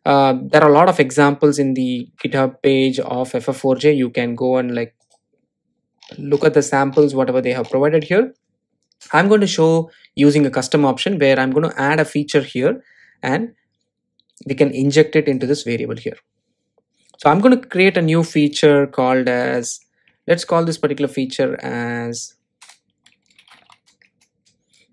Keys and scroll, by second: 24.3 Return.